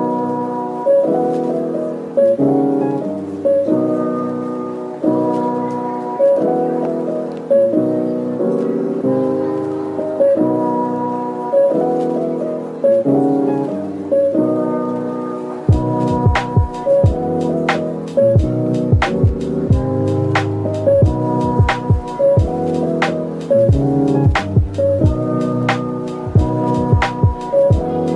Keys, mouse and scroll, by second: 8.4 shift+click, 9.9 shift+click, 10.1 ctrl+l, 27.0 scroll down 1.